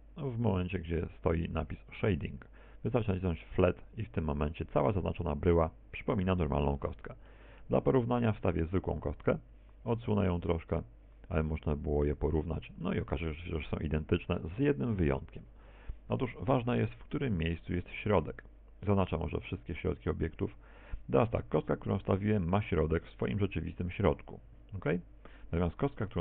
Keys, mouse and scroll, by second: 5.5 click, 6.5 middle click, 7.7 middle click, 10.2 shift+a, 12.0 click, 13.7 middle click, 14.9 middle click, 17.4 KP_1, 18.6 z, 21.5 click, 24.4 g, 25.4 ctrl+click.